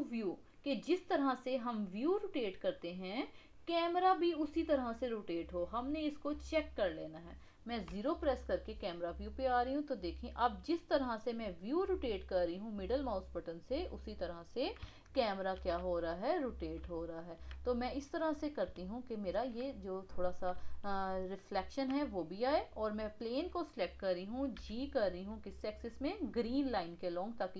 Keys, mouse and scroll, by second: 1.3-4.3 middle drag, 6.3 click, 7.9 KP_0, 9.2-12.3 middle drag, 15.0-20.2 shift+middle drag, 20.2 scroll up 2, 20.7-22.3 shift+middle drag, 22.3 click, 24.5 g.